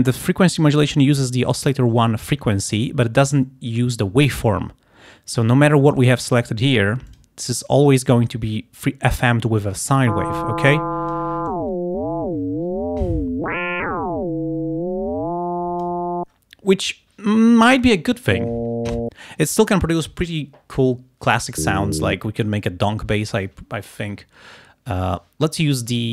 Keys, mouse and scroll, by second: 5.5 click, 6.0 click, 6.7 click, 7.2 click, 10.7 click, 11.6-13.7 drag.